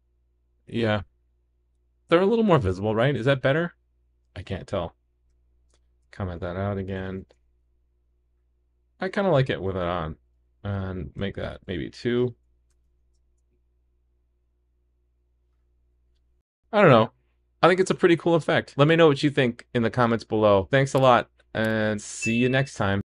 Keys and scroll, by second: 6.1 super+/, 7.3 super+s, 10.2 super+/, 12.9 super+s.